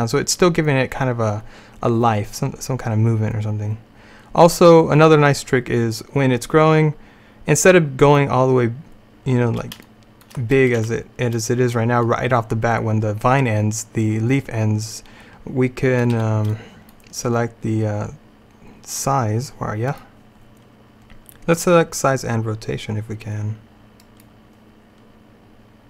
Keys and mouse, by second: 10.9 a, 16.2 b, 20.0-21.9 drag.